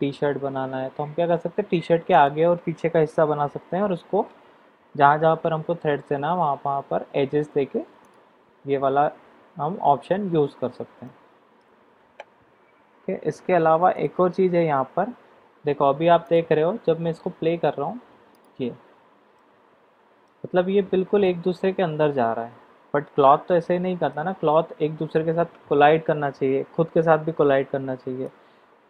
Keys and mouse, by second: 2.3 click, 8.0 click, 11.0 middle click, 14.0 click, 16.2 click, 18.3 click, 19.3-20.2 middle drag, 21.2-24.2 middle drag, 28.2-28.8 middle drag.